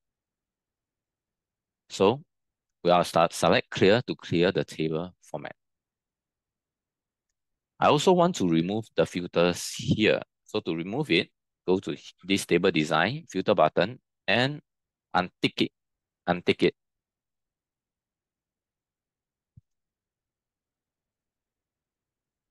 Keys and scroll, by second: 7.5 ctrl+t.